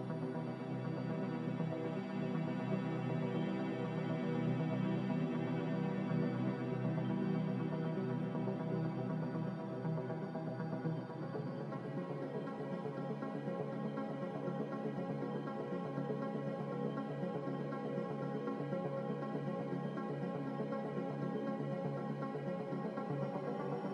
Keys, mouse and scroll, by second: 12.8-13.7 typing, 16.2 z, 17.8 typing, 18.1 Return, 19.2 z, 21.7-22.4 typing, 21.8 Return.